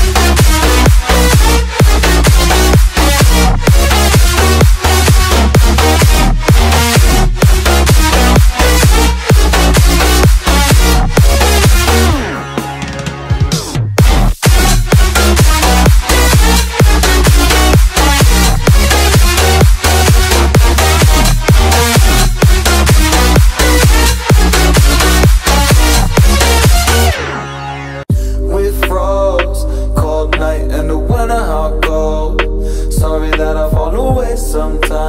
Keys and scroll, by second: 9.1 y, 10.2 v, 11.8 v, 14.7 ctrl+[, 16.2 ctrl+].